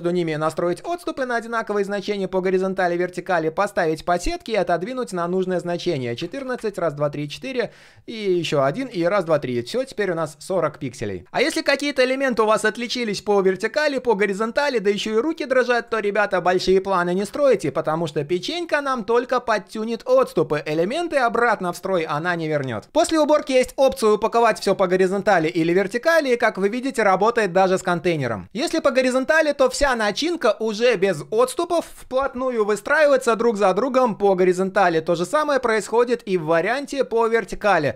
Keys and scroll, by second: 35.2 ctrl+z.